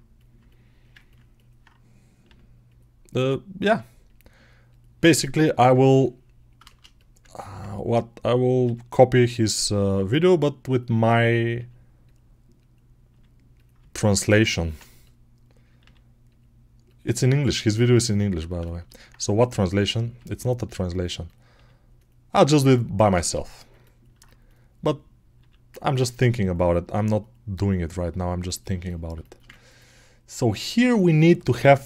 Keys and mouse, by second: 0.0 click, 0.2-3.1 alt+middle drag, 2.1 g, 3.1 click, 3.1-4.5 middle drag, 3.5 g, 4.5 click, 4.6-9.8 middle drag, 4.8 g, 8.5 g, 9.8 click, 9.9-12.4 middle drag, 10.0 g, 11.4 g, 12.4 click, 12.6-16.7 middle drag, 13.0 g, 15.6 g, 16.7 right click, 16.8-19.3 middle drag, 17.0 g, 19.3 click, 20.0-21.1 middle drag, 20.0 g, 21.1 click, 21.4-24.3 middle drag, 21.4 g, 24.3 click, 24.4-26.2 middle drag, 25.2 g, 26.2 right click, 26.3-31.8 middle drag, 26.7 g, 27.9 g.